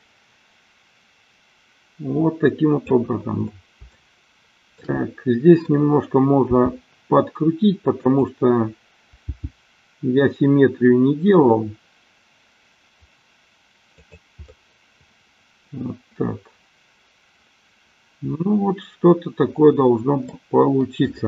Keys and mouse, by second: 3.9-4.9 shift+middle drag, 6.5 r, 7.9 click, 9.2 g, 13.9 click, 14.5-20.3 middle drag.